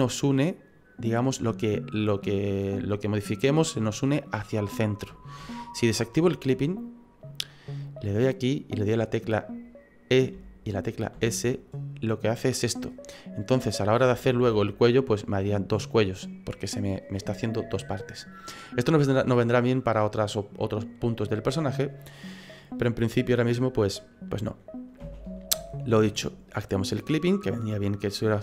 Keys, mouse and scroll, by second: 5.4 ctrl+z, 6.8 click, 8.2 right click, 10.3 e, 13.6 middle click, 14.4 e, 25.0 ctrl+z, 25.5 ctrl+z, 27.1 click, 28.3 middle click.